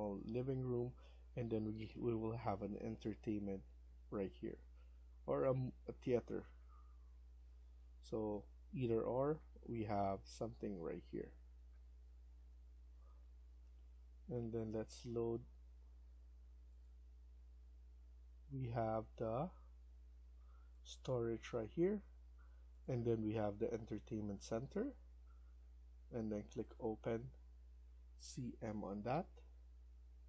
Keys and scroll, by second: 13.1 F1, 28.2-28.5 typing.